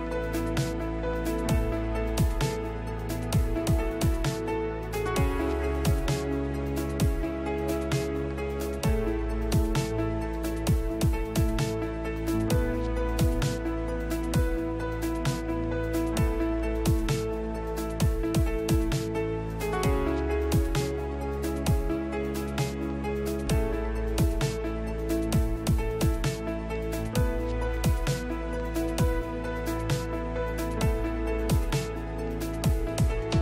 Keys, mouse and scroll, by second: 1.4-2.7 right drag, 2.3 Tab, 3.6 right click, 4.0 click, 6.2 shift+s, 9.0 shift+s, 13.5 ctrl+h, 19.3 Tab, 21.0 click, 27.0-28.7 drag, 28.1 shift+s.